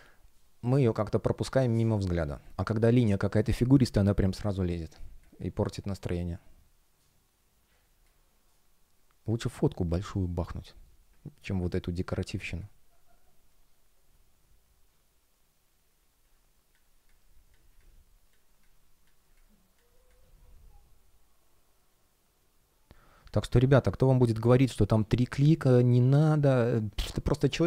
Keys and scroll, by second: 12.2 space.